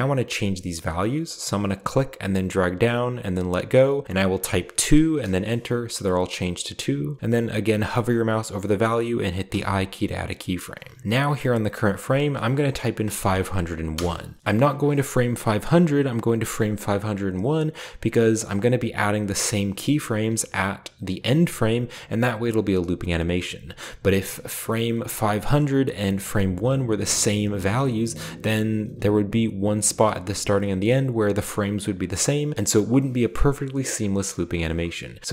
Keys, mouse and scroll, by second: 1.7-3.7 drag, 4.4 2, 5.1 Return, 9.4 i, 10.5-11.0 scroll down 1, 11.8 click, 12.7-13.1 typing, 13.9 Return.